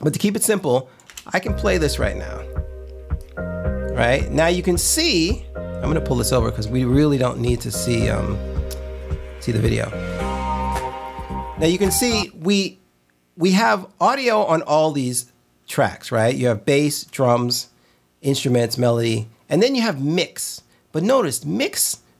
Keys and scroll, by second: 1.2 space, 12.2 space.